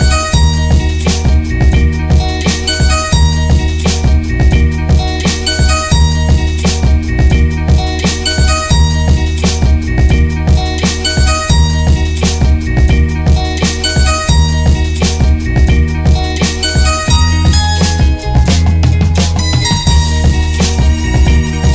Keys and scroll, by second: 1.8 Return, 4.9 Down, 7.4-8.3 typing, 8.7 alt+e, 10.5 Left, 10.6 Left, 13.5 Return, 15.7 ctrl+g, 16.4 Down, 19.9 alt+shift+Right.